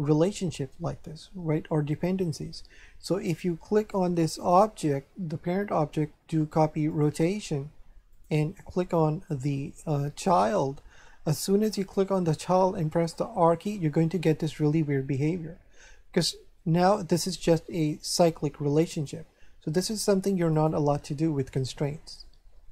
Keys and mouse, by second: 4.4 click, 6.9 click, 8.1 click, 10.3 click, 11.8 right click, 13.2 r, 18.9 right click, 20.5 right click.